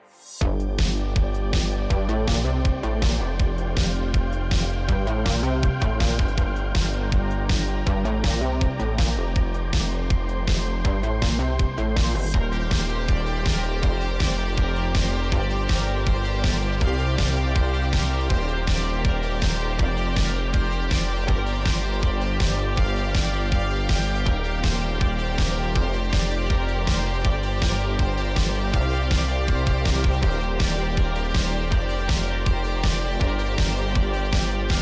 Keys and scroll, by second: 0.6 r, 2.0 r, 4.0 ctrl+Tab, 6.3 Tab, 7.3 Tab, 7.9 Tab, 8.4 2, 10.9 shift+s, 11.2 Tab, 12.0 Tab, 12.7 shift+s, 13.3 Tab, 17.3 Tab, 17.7 2, 18.8 KP_Decimal, 24.5 shift+s, 24.9 Tab, 26.5 Tab, 27.3 shift+s, 28.3 Tab, 30.9 Tab, 32.3 2.